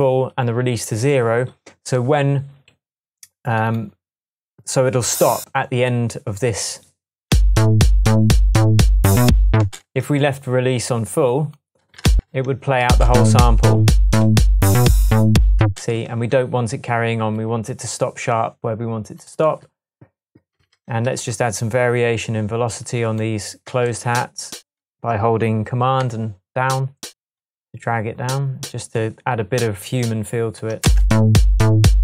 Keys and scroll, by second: 7.3 space, 9.6 space, 10.1 Tab, 12.1 space, 13.4 Tab, 14.1 shift+Tab, 15.6 space, 16.1 shift+Tab, 30.8 super+space, 31.8 space.